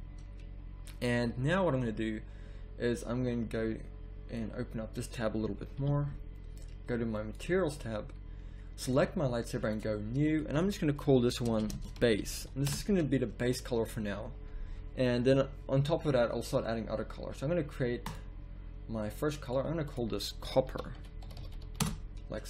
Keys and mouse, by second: 5.7 n, 8.4 click, 9.7-13.4 drag, 13.9-16.4 drag, 18.0-21.3 drag, 21.3 p.